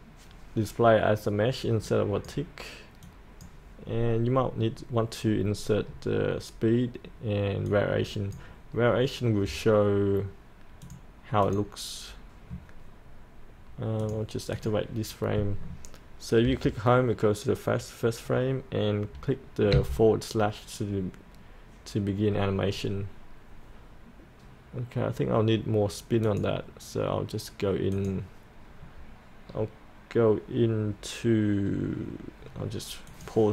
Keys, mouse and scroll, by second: 16.5 Home, 26.3 click, 27.7-33.5 drag.